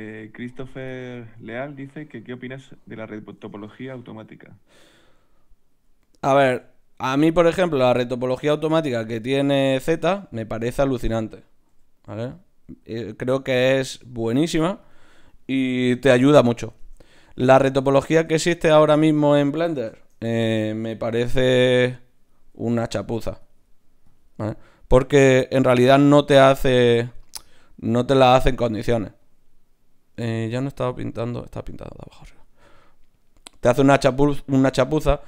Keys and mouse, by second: 4.8 ctrl+b, 6.4 ctrl+Tab, 9.1 Tab, 9.5-10.9 drag, 10.4 Tab, 11.7 g, 12.8 g, 14.3 ctrl+Tab, 15.8 f, 16.8 ctrl+Tab, 17.5 click, 18.6 click, 21.7 d, 21.9-24.9 drag.